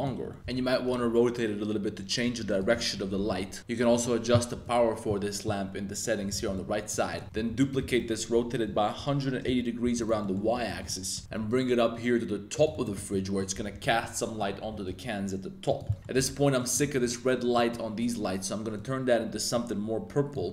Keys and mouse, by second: 0.2 shift+x, 0.3 shift+click, 0.4 r, 0.4 y, 0.8 x, 2.5 click, 2.7 middle click, 3.2 g, 3.3 z, 3.6 x, 4.6-6.3 drag, 6.5-6.9 middle drag, 7.1 middle click, 7.3-11.3 typing, 10.0 click, 10.2 middle click, 10.5 middle click, 12.7 shift+drag, 12.9 middle drag, 13.3-13.8 middle drag, 14.0-14.4 middle drag, 14.6 g, 14.8 z, 15.9 middle drag, 16.5 middle click, 17.5 middle click, 18.7 click.